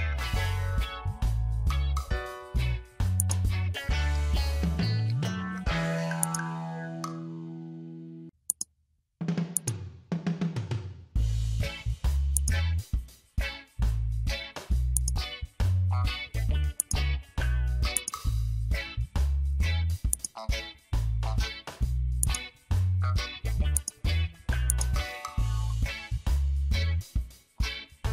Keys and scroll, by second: 4.7 ctrl+j, 13.8 ctrl+j, 21.3 ctrl+j.